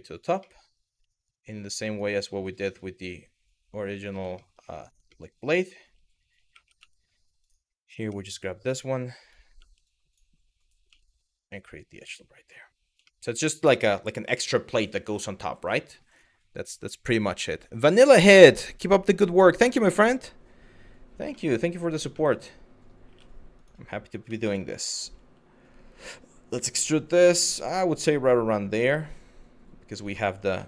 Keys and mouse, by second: 0.1 shift+middle click, 2.3 click, 4.0 shift+middle click, 4.7 shift+middle click, 6.1 2, 6.4 w, 7.1 click, 7.7 e, 8.8 click, 9.5 click, 11.6 click, 12.7 shift+middle click, 21.0 shift+middle click, 21.8 shift+middle click, 22.7 2, 24.1 middle click, 24.7 e, 29.6 click, 30.3 shift+middle click.